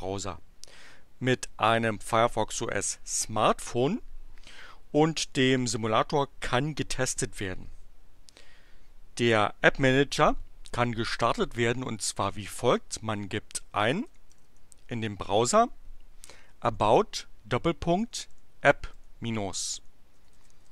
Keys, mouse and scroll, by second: 13.5-14.4 typing, 16.7 shift+., 17.9-20.7 typing.